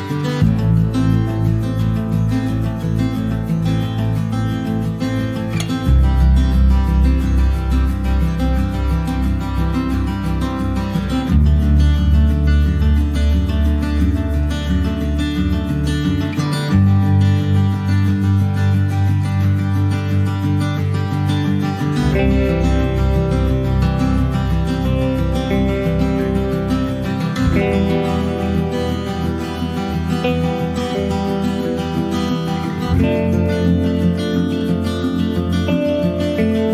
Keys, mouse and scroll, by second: 0.2 middle click, 0.7 Tab, 0.9 click, 1.2 scroll up 2, 1.4 middle click, 1.9 click, 2.3 scroll down 2, 2.4 middle click, 2.6 scroll up 2, 2.8-4.5 shift+middle drag, 4.5-7.4 drag, 7.4 KP_0, 8.3 scroll down 2, 8.6 middle click, 9.5 scroll down 1, 10.7-18.2 drag, 19.2 click, 19.5 scroll down 1, 19.7 middle click, 20.0-20.4 scroll up 3, 20.2 shift+middle click, 20.6-23.7 middle drag, 23.7 click, 24.0 middle click, 24.7 click, 25.0 shift+middle click, 25.2 scroll down 1, 25.3 middle click, 25.9 ctrl+s, 26.2 shift+middle click, 26.5 click, 26.8 click, 27.9 h, 28.1 click, 28.3 scroll down 2, 28.6 middle click, 28.7 ctrl+scroll up 1, 28.9 ctrl+s, 29.4 click, 29.9 middle click, 30.7 click, 31.0 shift+middle click, 31.7 ctrl+s, 31.9 click, 32.2 scroll down 2, 32.9 click, 33.5 scroll down 1, 33.7 shift+middle click, 34.2 ctrl+s, 35.8 click, 36.3 middle click, 36.6 ctrl+s.